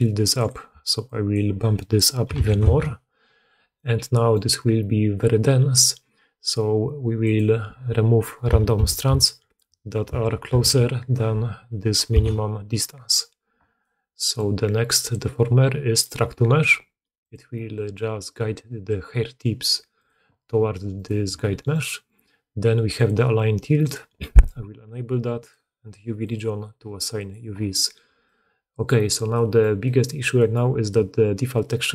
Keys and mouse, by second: 3.8 click, 3.8 right click, 4.0 click, 4.0 right click, 12.9-15.0 middle drag, 15.0-17.1 drag, 17.1 middle click, 17.2-19.8 drag, 19.8 middle click, 20.0 click, 20.9 middle click, 21.2 g, 21.9 click, 22.0 middle click, 22.8 click, 23.0 middle click, 23.7 click, 24.1 middle click, 24.2 click, 24.3 middle click, 25.3 click, 25.5 middle click, 26.1 click, 26.3 middle click, 27.0 click, 27.2-31.5 middle drag, 31.5-31.9 drag.